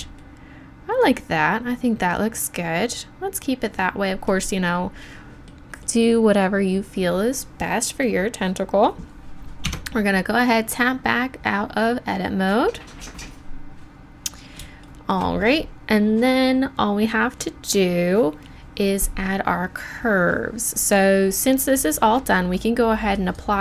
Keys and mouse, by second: 1.5-3.2 drag, 5.1-9.7 drag, 9.7 Tab, 23.1 click.